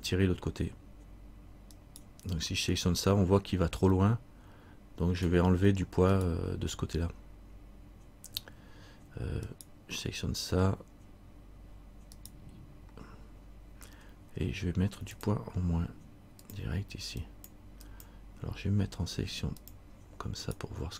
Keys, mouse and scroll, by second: 2.0 right click, 4.2 middle click, 6.3 right click, 9.7 right click, 15.3 click, 17.4 click, 18.7 click, 20.6 click, 20.6 right click.